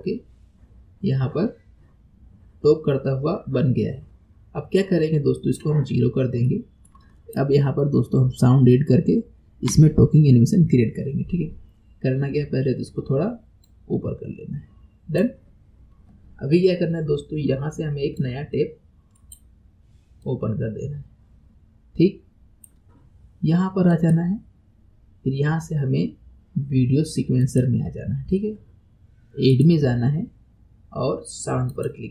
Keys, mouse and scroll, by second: 6.0-6.5 scroll down 1, 6.5-7.2 shift+middle drag, 7.2 click, 13.6-16.8 drag, 18.2-19.6 drag, 20.6-23.2 drag, 23.9-27.1 drag, 29.5-32.1 drag.